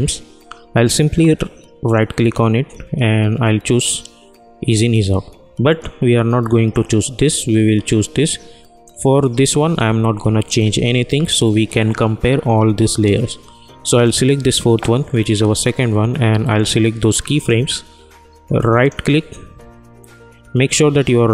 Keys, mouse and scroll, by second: 1.8 right click, 5.6 click, 8.8 click, 14.0-18.7 drag, 18.7 right click.